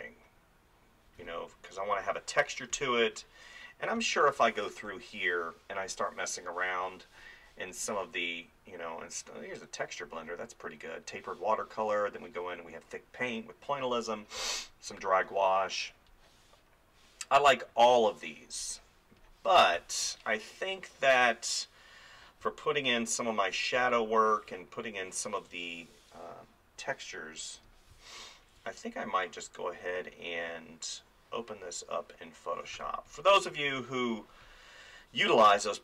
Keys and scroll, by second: 1.2 space, 19.8 space, 27.9 space, 32.8 space.